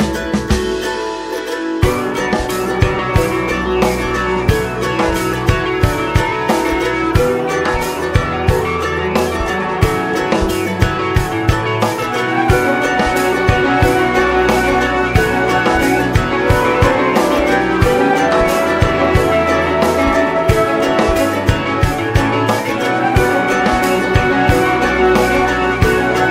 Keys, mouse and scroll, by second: 0.1-4.7 drag, 4.7 shift+middle click, 5.4 space, 6.6-8.7 middle drag, 8.7 space, 10.6-11.6 middle drag, 11.6 click, 12.1-15.0 shift+middle drag, 15.0-18.5 drag, 18.5-19.7 middle drag, 19.7-24.6 drag, 24.6-26.3 middle drag.